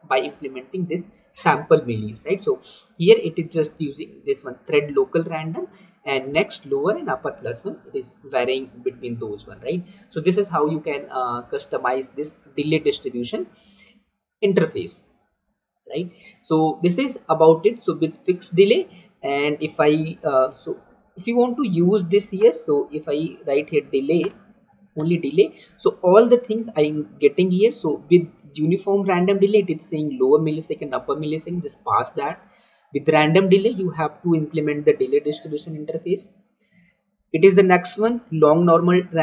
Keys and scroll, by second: 26.5 Down, 27.5 Up, 28.2 Down, 32.4 Down, 36.4 Down, 38.0 Down.